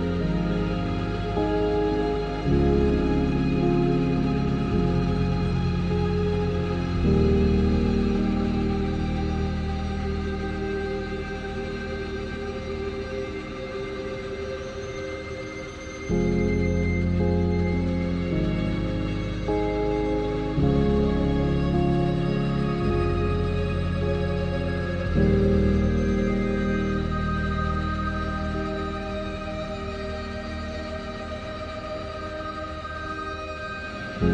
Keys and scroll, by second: 1.4 e, 3.5 ctrl+z, 4.0 s, 9.7 Tab, 12.3 a, 12.7 a, 15.6 Tab, 18.6 ctrl+z, 20.8 ctrl+z, 31.2 Tab, 31.6 Tab, 33.2 Tab, 33.6 e.